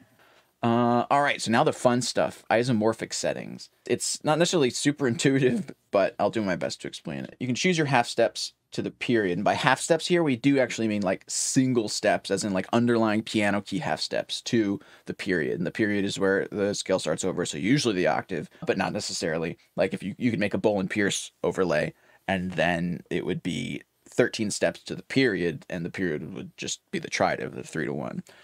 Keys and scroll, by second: 28.3-28.4 typing.